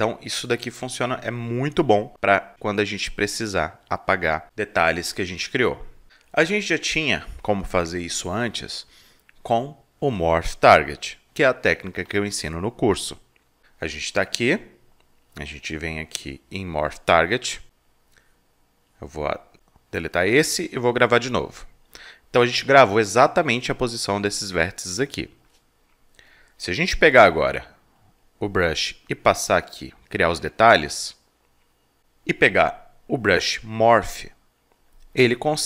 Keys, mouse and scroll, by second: 0.0 click, 0.2-1.3 drag, 2.1-4.8 drag, 5.1-7.3 drag, 7.5-9.5 drag, 10.0 alt+double click, 11.3-13.1 alt+drag, 15.3-16.4 drag, 17.6-20.1 drag, 20.9 click, 22.5 alt+click, 23.0 right click, 26.3 click, 28.0 click, 29.1-32.0 drag, 32.4 click, 34.1 click, 35.2 click.